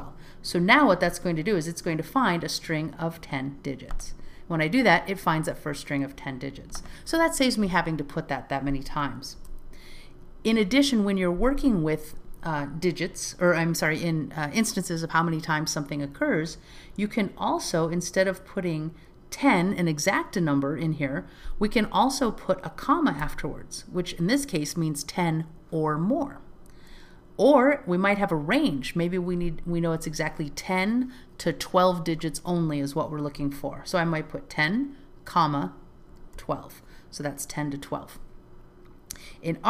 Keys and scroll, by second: 1.0 alt+z, 9.9 alt+z.